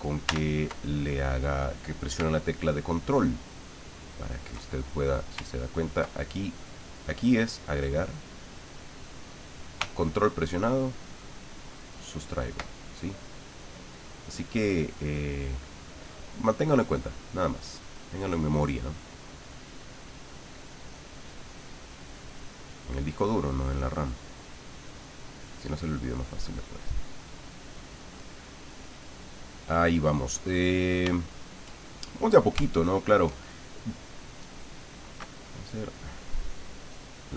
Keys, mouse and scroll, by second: 2.9-4.6 ctrl+drag, 7.0-8.8 drag, 10.6-12.7 ctrl+drag, 13.2-16.6 drag, 16.9 middle click, 17.9 click, 18.7 click, 18.7 middle click, 19.7-20.7 drag, 20.8-28.4 drag, 28.5-29.9 drag, 30.0 middle click, 31.2 shift+middle click, 32.1-33.2 middle drag, 36.3-37.3 drag.